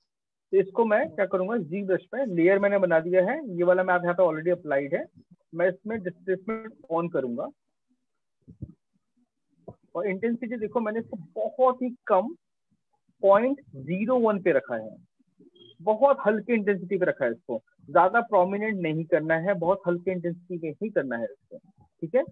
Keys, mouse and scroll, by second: 1.1 click, 6.0 click, 9.4 alt+click, 12.1 right click, 15.0 right click.